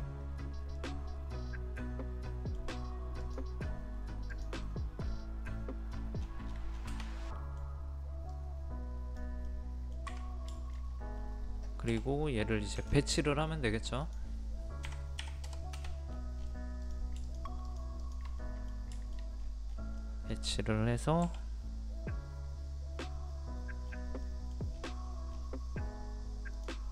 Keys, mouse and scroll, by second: 0.2-0.6 scroll up 1, 0.8-2.9 middle drag, 3.2 click, 4.6-5.9 middle drag, 5.9 scroll down 1, 6.6 scroll up 1, 6.7-7.3 scroll down 1, 7.3 middle click, 8.3 click, 9.5 middle click, 10.6 shift+middle click, 10.9 scroll up 1, 11.9 m, 12.8 ctrl+click, 15.2 KP_3, 16.1 scroll down 1, 16.5-16.8 scroll up 1, 16.8 click, 17.3 shift+click, 18.0 shift+click, 18.4 middle click, 19.0 shift+middle click, 19.4-19.7 scroll up 1, 20.0 middle click, 21.2 m, 23.8-24.2 scroll down 1, 24.2-24.7 scroll up 2, 24.2 middle click, 25.3 scroll down 1, 26.6 click.